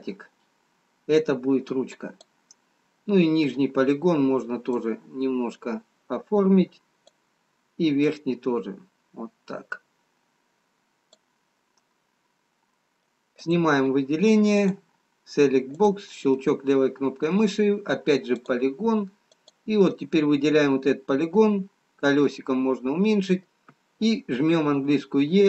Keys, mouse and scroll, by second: 4.7 click, 10.1 click, 12.0 middle click, 13.6 click, 15.9 click, 16.9 middle click, 19.4 click, 20.1 middle click, 22.8 middle click, 22.8 scroll down 4.